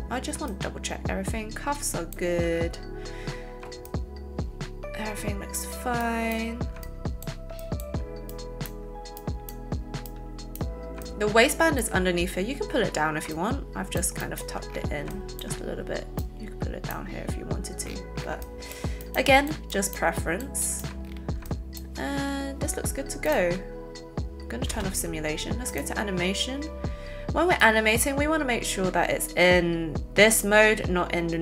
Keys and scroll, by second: 24.7 space.